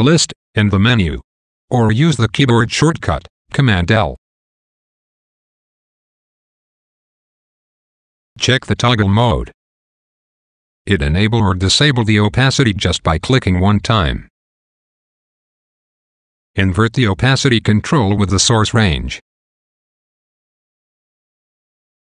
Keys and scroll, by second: 2.7 super+l, 6.3 a, 9.8 a, 12.5 a, 14.6 a.